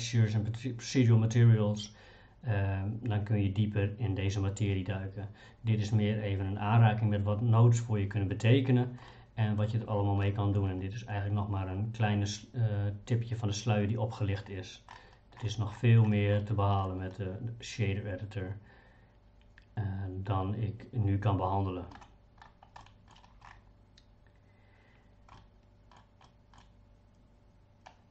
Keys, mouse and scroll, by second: 9.1 middle click, 10.2 middle click, 16.4 middle click, 22.8 middle click, 25.3 middle click, 26.2 middle click.